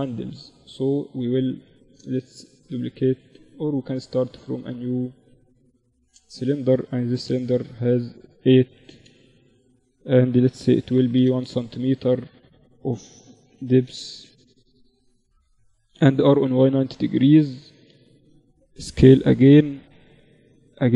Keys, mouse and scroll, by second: 1.2-3.0 right drag, 2.6 click, 3.0 shift+a, 4.2 click, 6.0 F6, 13.6 z, 14.9 r, 16.4-18.2 middle drag, 18.2 s, 20.5 s.